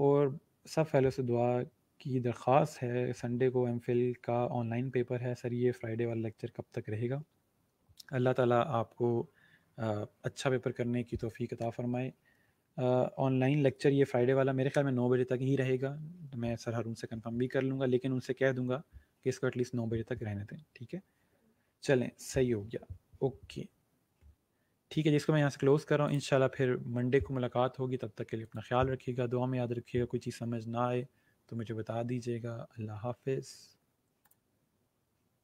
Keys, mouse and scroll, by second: 26.0 click, 28.4 click, 34.1 click.